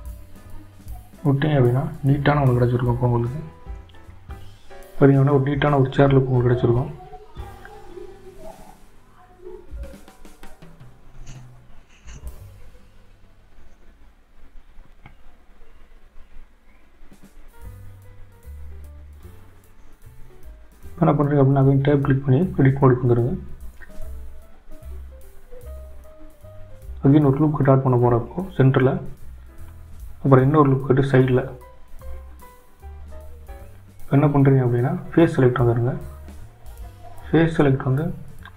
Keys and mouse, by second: 5.4 click, 6.9 Tab, 9.0-13.4 drag, 13.4-20.8 middle drag, 22.3 Tab, 29.5 ctrl+r, 33.1 ctrl+r, 36.1 middle click.